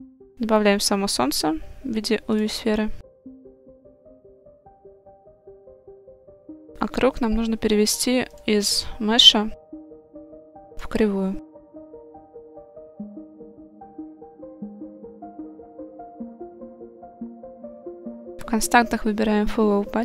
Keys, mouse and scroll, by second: 0.1-3.1 drag, 3.3-4.9 middle drag, 6.0 click, 8.4-9.1 drag, 12.0-12.7 middle drag, 13.8-14.9 drag, 15.5 click, 16.6 click, 17.4 click, 18.2-20.0 drag.